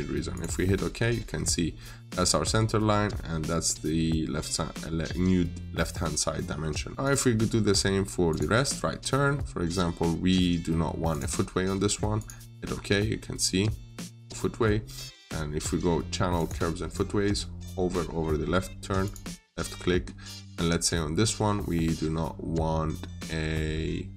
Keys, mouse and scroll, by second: 0.8-2.4 scroll up 1, 4.4-6.2 scroll down 1, 6.2 middle click, 6.9 click, 12.5-14.0 scroll up 1, 14.0 scroll down 1, 14.2 middle click, 16.2 click.